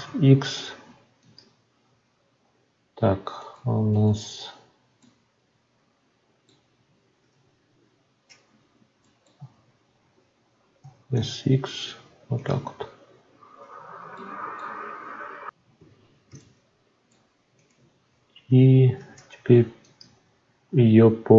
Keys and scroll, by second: 7.2 Tab, 12.7 Tab, 18.9 shift+d.